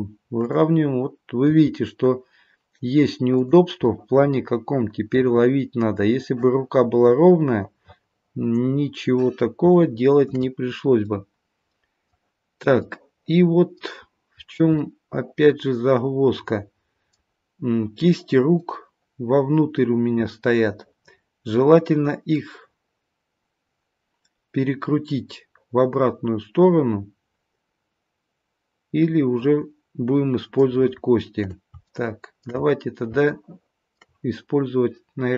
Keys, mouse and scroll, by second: 0.4 click, 1.4 g, 3.8 middle click, 7.1 middle click, 9.8 shift+middle click, 10.5-12.0 scroll up 3, 11.0 middle click, 14.0-14.7 scroll down 3, 14.7 middle click, 17.2-17.8 scroll down 1, 18.6 middle click, 31.9 shift+middle click, 32.6-33.2 scroll up 3, 33.2 shift+middle click.